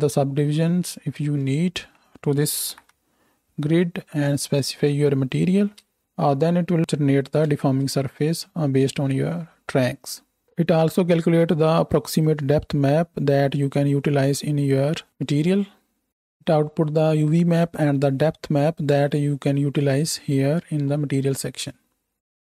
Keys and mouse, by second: 2.9 shift+Right, 3.0 shift+Left, 5.9 space, 7.6 space, 15.1-16.1 drag.